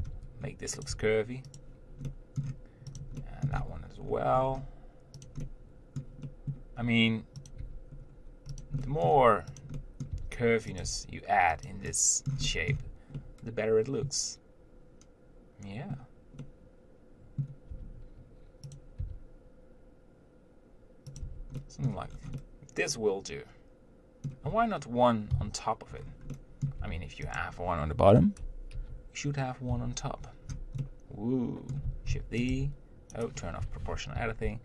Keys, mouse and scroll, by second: 0.2 r, 1.2 g, 2.3 middle click, 3.2 click, 3.4 middle click, 3.8 g, 5.7-7.8 middle drag, 7.8 click, 7.9 g, 9.0 middle click, 9.8 click, 10.0 middle click, 10.4 r, 11.1 g, 12.6 scroll up 1, 12.7 middle click, 13.0 Tab, 13.5-18.0 middle drag, 18.0 Tab, 19.1 click, 19.2 r, 21.5 Tab, 21.8 middle click, 22.3 scroll down 1, 22.6-25.6 middle drag, 25.6 KP_1, 26.2-26.6 scroll up 1, 26.6 middle click, 27.1 Tab, 27.6 click, 29.0 ctrl+l, 31.0-32.3 middle drag, 32.3 shift+d, 32.8 r, 33.8 o, 34.4 r.